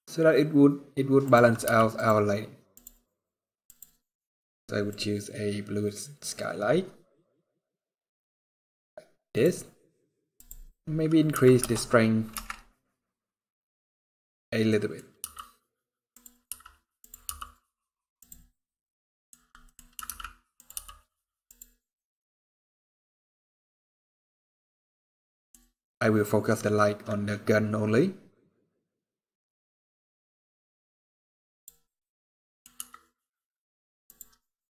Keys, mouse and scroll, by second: 1.4 g, 2.4 click, 3.4 click, 10.1 click, 14.2-14.6 scroll down 3, 14.4 middle click, 14.9 g, 16.2 r, 17.0 g, 18.2 middle click, 19.7 middle click, 19.7 r, 20.4 g, 21.7 scroll up 4, 22.3 scroll down 1, 23.1 middle click, 25.4 scroll up 2, 28.1 click, 31.6 scroll down 2, 31.8 middle click, 32.5 r, 34.2 scroll down 2.